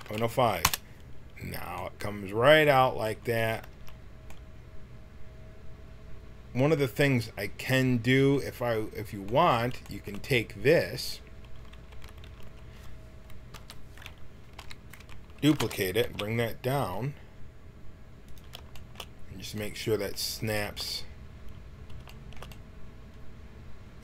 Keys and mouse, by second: 3.4 Tab, 3.7 a, 11.9 Tab, 12.4 a, 13.5 l, 14.5 KP_1, 15.6 shift+d.